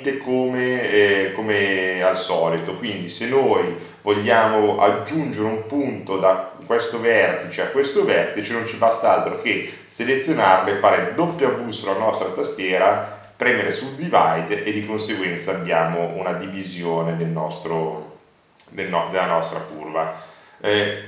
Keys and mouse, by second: 3.1-6.0 middle drag, 6.0 g, 13.2 w, 16.5 click, 16.7 click, 17.5-18.9 drag.